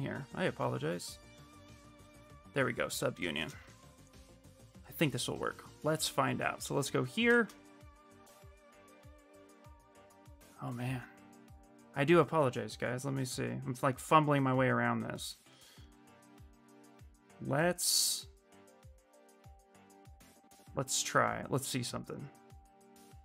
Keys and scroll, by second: 3.0 shift+f.